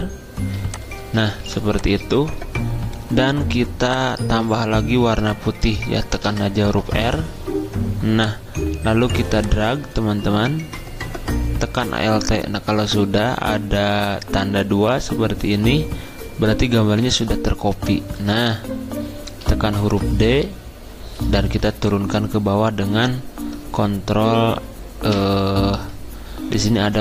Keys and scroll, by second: 1.4 v, 6.2 r, 19.4 d, 21.5 v, 25.1 ctrl+[.